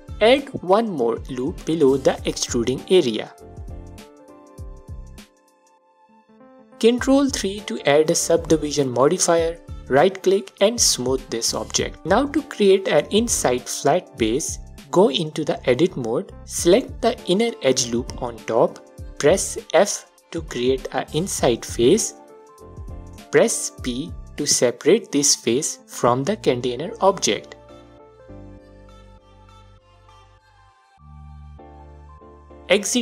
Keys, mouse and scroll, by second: 0.3 ctrl+r, 5.0-5.3 scroll down 1, 5.4-9.3 alt+drag, 6.1 Tab, 7.8 3, 9.3-10.2 right drag, 10.2 click, 10.8-12.3 alt+drag, 12.9 Tab, 15.3 click, 16.7 click, 19.1 f, 24.3 p, 25.0-26.9 alt+drag, 25.7 Tab, 28.4-33.0 drag.